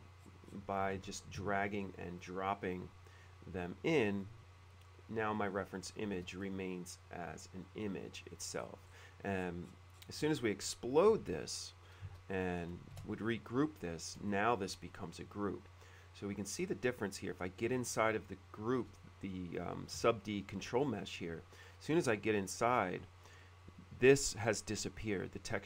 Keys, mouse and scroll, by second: 0.1-0.9 scroll up 2, 1.2 alt+Tab, 2.2-4.4 drag, 5.5 click, 6.2 space, 6.6 click, 8.7 middle click, 9.1 middle click, 9.5 scroll up 1, 9.6 middle click, 10.1 scroll up 1, 10.8 middle click, 11.3 x, 12.5 click, 12.5 space, 12.6 click, 13.2 shift+g, 14.4 shift+middle click, 16.7 scroll up 1, 16.8 middle click, 17.4 click, 17.7 shift+g, 18.0 shift+middle click, 21.3 click.